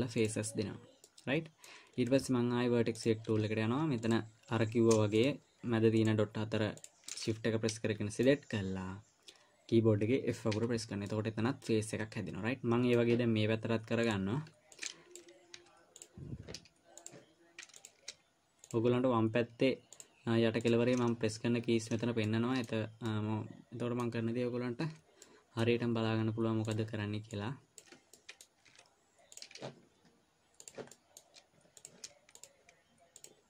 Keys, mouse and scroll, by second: 1.4 middle click, 3.4 click, 4.4 click, 5.6 shift+click, 6.4 shift+click, 7.6 middle click, 10.9 f, 11.4 middle click, 14.4 click, 16.0 Delete, 17.4 click, 18.5 click, 19.0 shift+click, 20.3 shift+click, 21.2 shift+click, 22.6 middle click, 23.4 middle click, 25.2 f, 25.6 middle click, 27.0 click, 27.7 click, 28.6 middle click, 29.0 Delete, 31.0 click, 31.3 middle click, 32.2 click, 32.7 shift+click.